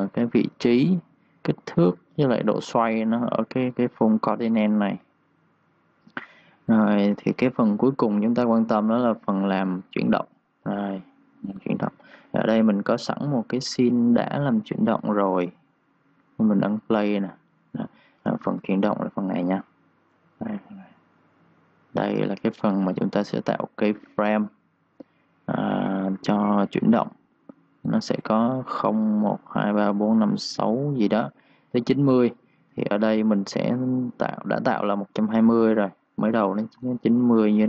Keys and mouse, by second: 0.3 click, 9.7 click, 13.1 Delete, 14.9 click, 18.4 ctrl+shift+d, 32.7 Escape, 33.4 click, 36.6 9.